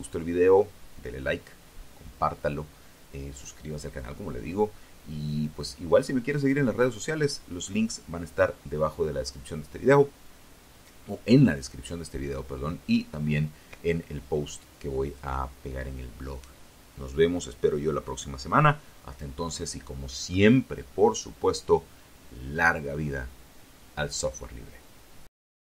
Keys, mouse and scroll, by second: 23.7 click, 25.5 click.